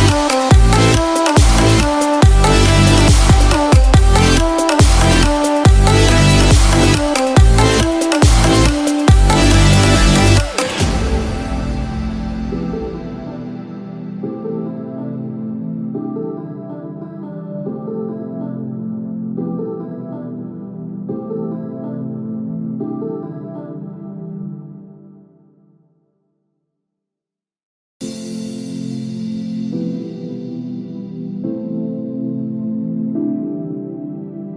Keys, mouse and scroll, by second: 24.1 scroll down 2, 24.2-24.5 scroll up 3, 24.9 middle click.